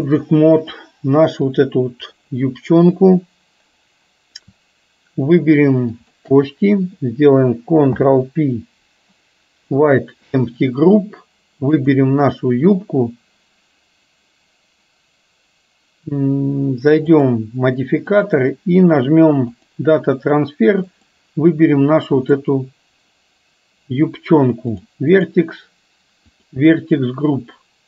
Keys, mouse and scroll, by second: 0.2 click, 1.4 click, 6.1 shift+click, 7.9 ctrl+p, 11.8 click, 18.2-19.9 drag, 21.1 click, 24.8 click, 25.2 click.